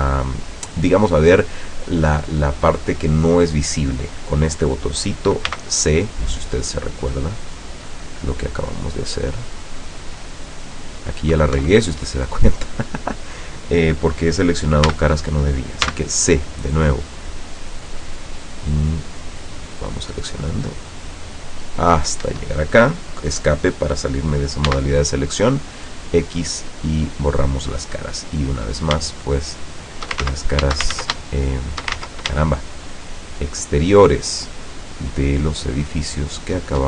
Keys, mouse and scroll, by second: 5.6 c, 6.7-11.6 drag, 11.7 Escape, 12.4-12.8 scroll up 2, 12.9-13.5 scroll down 4, 14.9 a, 15.9 c, 17.2-22.2 drag, 22.4 Escape, 24.7 x, 25.8 click, 26.5-27.5 middle drag, 27.7 scroll up 1, 28.2 middle click, 28.8 shift+right click, 29.2 shift+right click, 29.6 shift+right click, 30.4 ctrl+shift+z, 31.1 ctrl+shift+z, 31.4 ctrl+shift+click, 32.1 ctrl+shift+z, 32.7 shift+click, 32.8 shift+right click, 33.7 shift+right click, 34.4 shift+right click, 35.1 shift+right click, 35.8 shift+right click, 36.6 shift+right click.